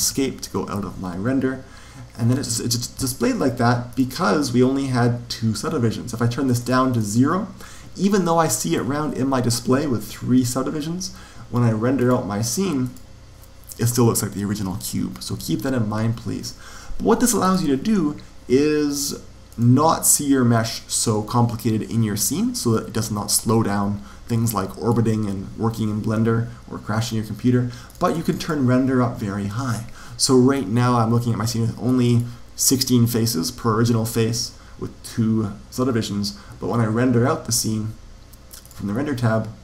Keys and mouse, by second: 3.8 click, 6.5 click, 9.6 middle click, 11.9 click, 15.3 Escape, 17.4 click, 19.4 click, 22.4-25.5 middle drag, 27.8-30.0 drag, 30.1-33.5 middle drag, 38.5 click.